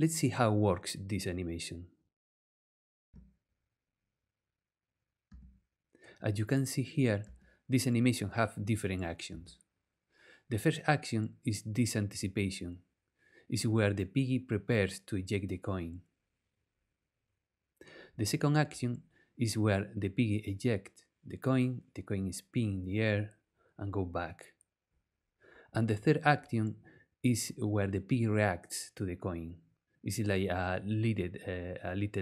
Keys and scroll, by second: 3.1 space, 3.7 space, 5.3 space, 7.2 space, 9.3 space.